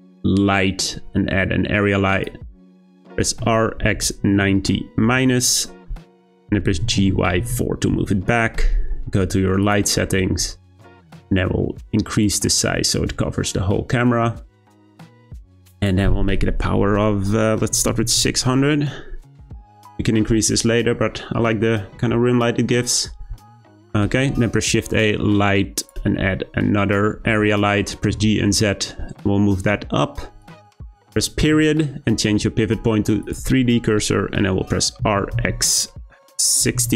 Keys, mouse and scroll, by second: 3.4 r, 6.7 g, 9.6 click, 12.2-15.2 drag, 15.7-18.0 drag, 18.0 0, 24.2 shift+a, 26.5-27.2 scroll down 2, 27.2 g, 31.4 ., 35.0 r.